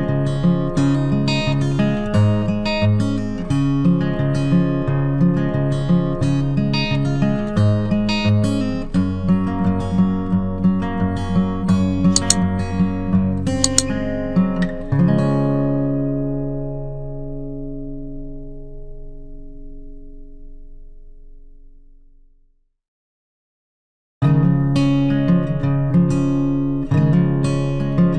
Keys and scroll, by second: 17.0 ctrl+t.